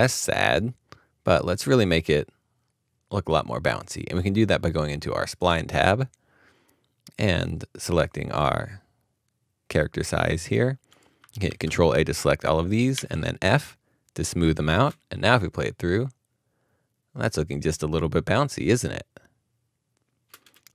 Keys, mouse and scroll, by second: 9.8 Return, 9.8 middle click, 11.4 ctrl+a, 14.7 f, 20.3 f.